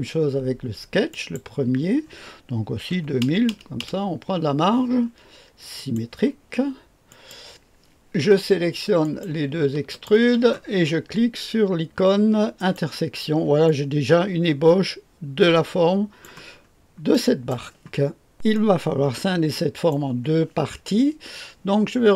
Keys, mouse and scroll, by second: 1.1 click, 2.9 KP_2, 3.2 KP_0, 3.8 KP_0, 5.7 click, 7.1 click, 9.0 click, 9.9 ctrl+middle click, 10.0 ctrl+click, 12.5 click, 13.6-16.6 drag, 16.7-17.3 scroll up 1, 17.1 middle click, 18.3-19.9 drag.